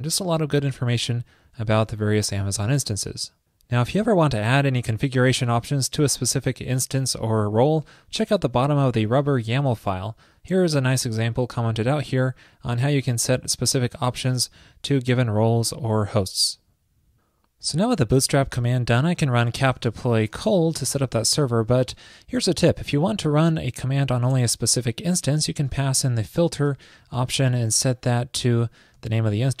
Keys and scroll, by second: 21.9 ctrl+a.